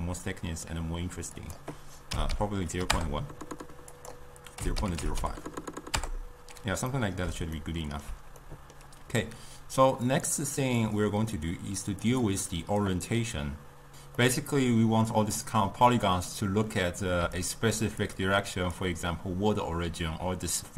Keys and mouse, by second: 0.1-1.4 middle drag, 1.4-7.0 drag, 7.0-10.2 middle drag, 10.2 click, 10.9 click, 12.2 click, 14.2-17.2 middle drag, 17.2 d, 17.4-17.8 drag, 17.8 d, 18.1-18.8 drag, 18.8-19.3 d.